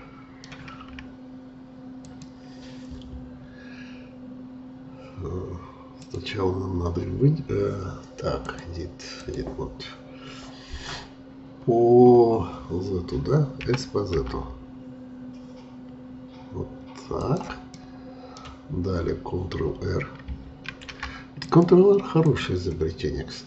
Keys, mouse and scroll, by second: 2.0 click, 5.9-11.6 drag, 13.6 s, 17.7-20.7 middle drag, 20.7 ctrl+r.